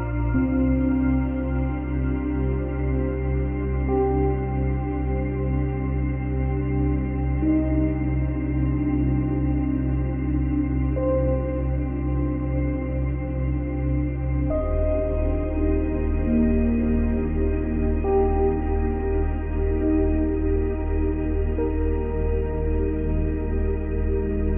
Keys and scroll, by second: 4.7 space, 7.3 space, 9.5 space.